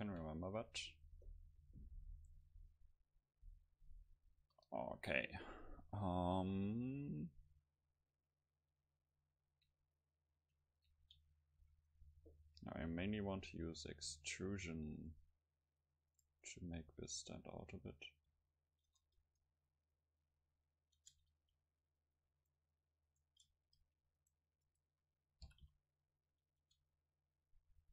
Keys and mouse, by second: 2.6-6.7 middle drag, 4.4 KP_0, 8.0-9.1 middle drag, 11.6 a, 12.9 c, 16.2-18.7 drag, 16.6 middle click, 16.8 right click, 16.9 e, 18.3 s, 18.9 Tab, 20.6 click, 21.0 Tab, 21.4 r, 22.1-24.2 drag, 25.4 g, 26.6 Tab, 26.9 click, 27.4-27.9 middle drag.